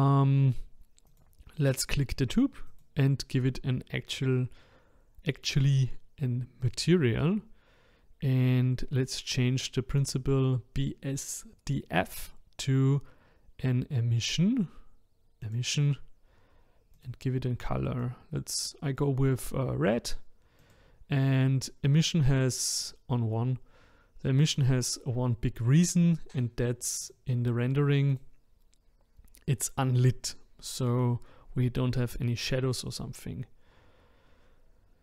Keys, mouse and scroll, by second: 1.1 click, 2.7 click, 6.6-9.7 drag, 12.1-15.3 drag, 16.9 click, 20.6 click, 27.0 click, 28.1 click.